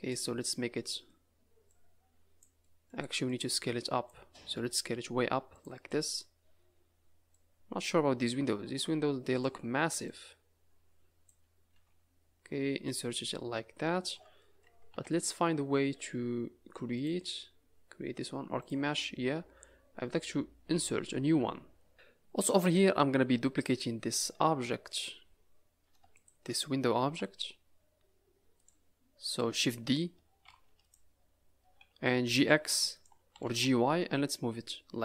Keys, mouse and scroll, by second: 0.4 middle click, 1.6 click, 2.6 middle click, 3.2 click, 4.4 s, 5.8 middle click, 6.4 scroll down 4, 6.7 scroll up 4, 7.3 click, 10.0 click, 11.7 s, 13.2 middle click, 14.4 middle click, 14.9 n, 16.9 click, 18.6 click, 19.1-19.7 scroll down 4, 19.7 scroll up 3, 21.9 n, 22.4 middle click, 23.1 scroll up 2, 23.6 click, 24.1-24.9 scroll up 1, 24.9 click, 26.1 shift+click, 26.6-27.9 scroll down 2, 27.0 g, 29.1 s, 30.4 shift+d, 32.2 g, 33.3 g.